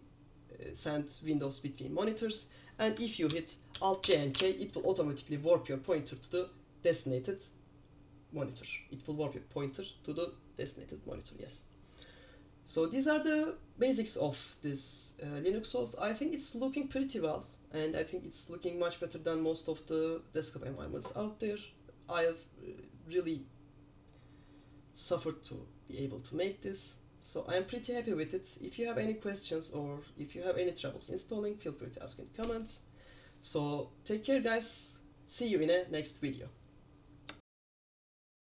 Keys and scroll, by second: 3.4 alt+j, 3.9 alt+j, 4.1 alt+j, 4.5 alt+j.